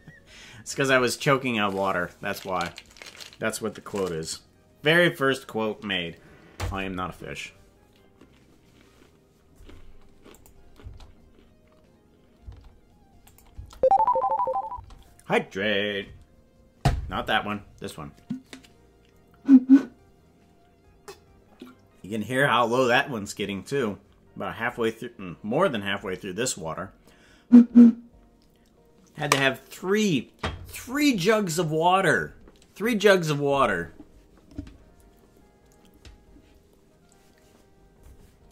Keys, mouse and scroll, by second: 10.3 click, 10.8 space, 12.4 space, 13.2 click, 13.5 space, 14.7 space.